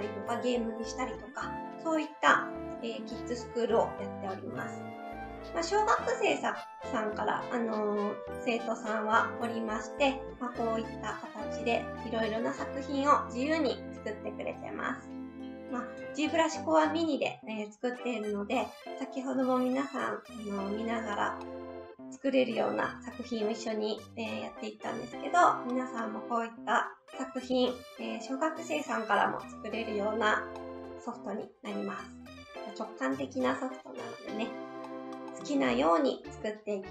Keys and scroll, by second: 5.2 Right, 31.9 Right.